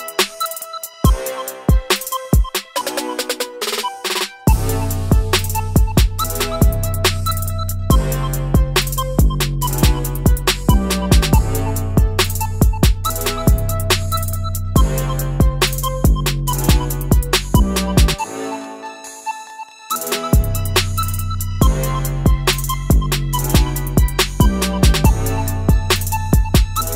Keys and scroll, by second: 7.8 ctrl+z, 8.0 ctrl+z, 14.7 Escape, 23.6 Escape.